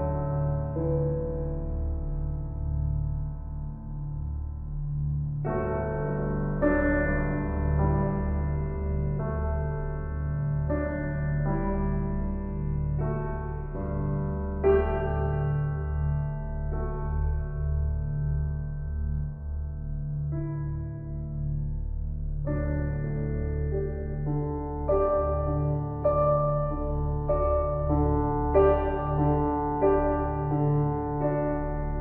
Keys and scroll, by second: 8.5 ctrl+g.